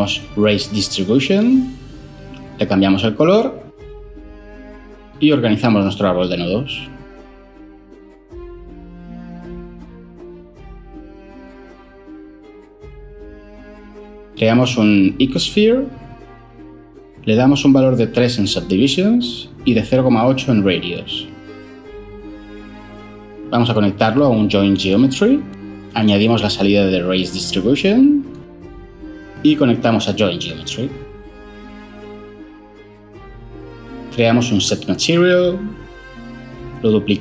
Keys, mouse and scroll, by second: 0.4 Return, 14.2 ctrl+shift+a, 14.4-14.9 typing, 15.6 Return, 18.8 3, 19.4 Return, 20.2-20.7 typing, 25.6 Return, 34.2 ctrl+shift+a, 34.5-35.4 typing.